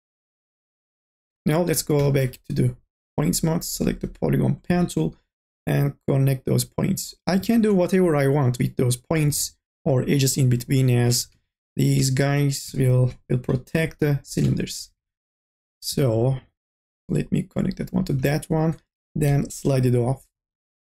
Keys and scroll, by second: 2.0 1, 8.0 ctrl+z, 9.7 ctrl+z, 11.2 2, 11.7 e, 15.0 1, 19.2 m, 19.7 o.